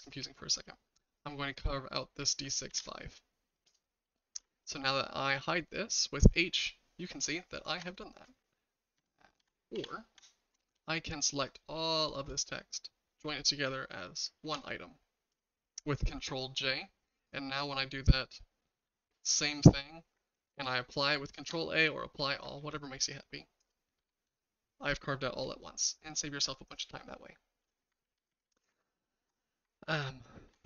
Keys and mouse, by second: 2.7 ctrl+a, 3.6 click, 4.4 h, 4.8-7.8 shift+middle drag, 7.4 shift+right click, 7.4 h, 9.0 ctrl+z, 9.4 ctrl+z, 9.7 ctrl+z, 12.0 shift+click, 14.4 ctrl+j, 17.2 click, 22.6 ctrl+a, 24.0 h, 24.4 shift+middle click, 24.4 shift+drag, 24.7-27.6 shift+middle drag, 28.0 ctrl+z, 28.2 ctrl+z, 28.3 ctrl+z, 28.4 ctrl+z, 28.6 ctrl+z, 28.8 ctrl+z, 29.0 ctrl+z, 29.9 ctrl+z, 30.5 ctrl+z.